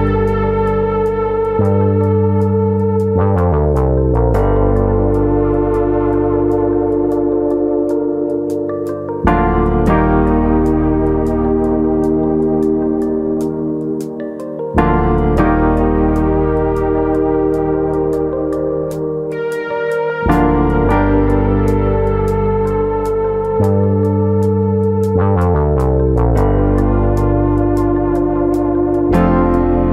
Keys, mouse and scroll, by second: 3.9 click, 8.5-9.2 scroll up 4, 8.8 shift+middle click, 9.2 s, 10.2 click, 10.6 click, 13.9 click, 13.9 KP_3, 16.3 click, 16.5 KP_1, 17.0 scroll up 4, 17.7 middle click, 18.1 shift+middle click, 18.3 middle click, 19.1 click, 20.4 middle click, 20.9 shift+middle click, 21.4 s, 22.0 click, 22.6 click, 23.8 middle click, 23.8-24.1 scroll down 1, 24.1 middle click, 24.7 click, 26.1 middle click, 27.4 click, 28.2 middle click, 29.0 middle click.